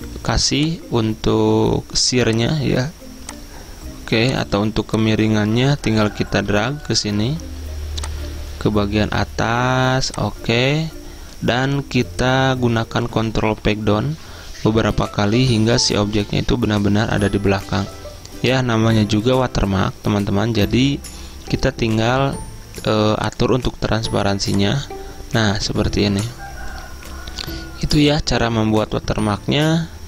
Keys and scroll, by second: 13.8 ctrl+Page_Down, 14.3 ctrl+Page_Down.